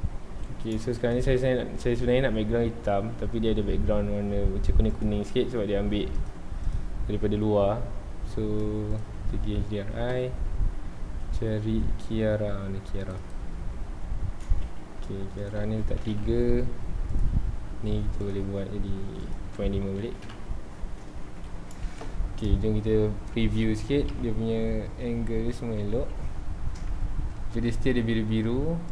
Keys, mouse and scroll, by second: 0.1 scroll up 2, 0.4 alt+a, 0.8 ctrl+s, 1.1 click, 1.6 ctrl+s, 4.9 click, 6.1-9.8 drag, 14.8 ctrl+s, 15.4 click, 16.1 KP_3, 16.1 KP_Enter, 17.1 click, 18.2 click, 19.2-20.3 drag, 20.3 KP_Enter, 21.0-21.4 scroll down 1, 21.4 alt+a, 21.8 ctrl+s, 24.1 Right, 27.1 ctrl+s.